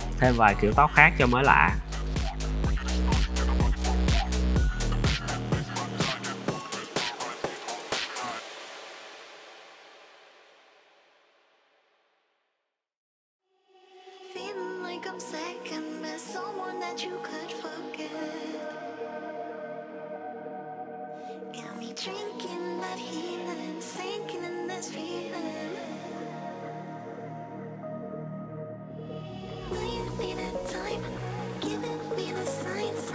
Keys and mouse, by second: 0.0 shift+d, 0.6 click, 1.2-1.7 middle drag, 1.9-4.0 typing, 2.0 Tab, 2.1 click, 2.3 alt+click, 3.3 click, 4.3 click, 4.7 click, 5.2 click, 5.9-6.5 middle drag, 6.6-8.4 typing, 8.2 drag, 10.0-11.9 typing, 10.8 click, 11.4 click, 12.2 click, 12.5 click, 13.0 click, 13.3 middle click, 13.6 click, 14.0 middle click, 14.2 middle click, 14.7 `, 15.0 click, 15.4 s, 15.9 click, 16.2 click, 16.9 Tab, 17.1 middle click, 17.8 middle click, 18.2 click, 19.0 click, 19.8 middle click, 20.6 click, 21.1 Tab, 21.2 `, 21.7 drag, 21.8-22.1 middle drag, 22.3-22.8 middle drag, 23.1 `, 23.9 click, 26.4 shift+d, 27.0 click, 27.2 Tab, 27.6 x, 28.5 middle click, 29.0 middle click, 29.1 z, 29.4 middle click, 29.9 shift+click, 31.1 click, 31.5 middle drag, 31.9 e, 32.3 click.